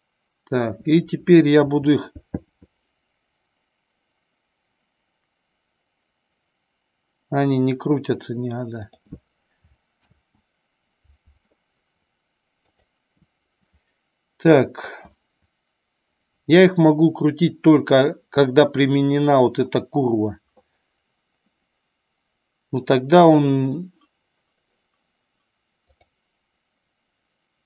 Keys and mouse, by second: 1.9 r, 9.0 click, 10.4 ctrl+z, 12.9 click, 26.1 click.